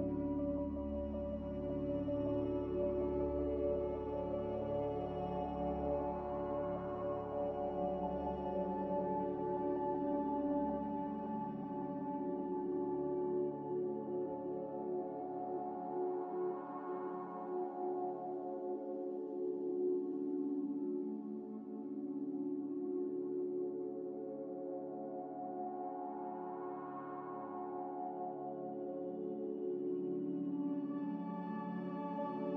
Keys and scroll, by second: 1.9 a, 6.9 ctrl+z, 7.5 ctrl+z, 26.3 ctrl+z, 26.4 ctrl+z, 26.5 ctrl+z, 26.7 ctrl+z, 27.0 ctrl+z.